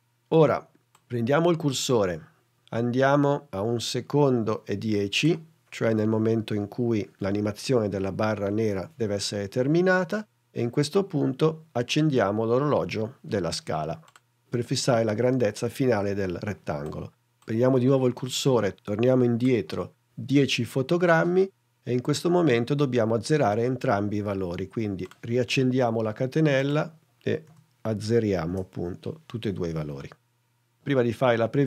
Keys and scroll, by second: 27.8 0, 28.7 Return.